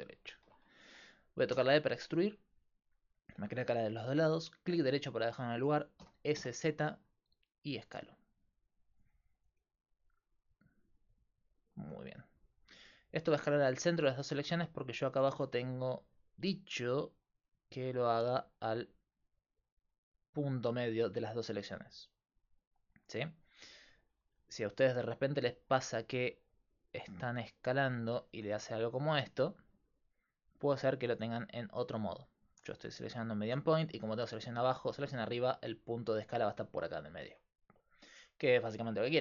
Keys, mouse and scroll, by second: 1.6 e, 6.0 s, 12.8 middle click, 13.1 middle click, 13.3 middle click, 19.5-20.7 drag, 28.0 click, 28.6 s, 37.3-39.2 middle drag.